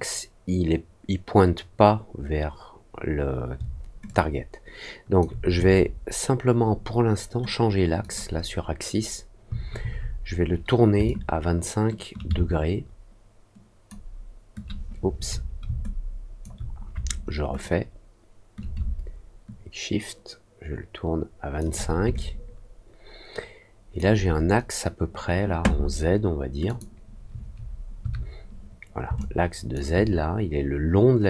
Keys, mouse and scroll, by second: 4.0-5.1 alt+drag, 7.9 click, 11.0-13.8 shift+drag, 15.8 alt+click, 17.5-21.5 shift+drag, 22.1-23.9 alt+drag, 26.6 click, 29.1 alt+click.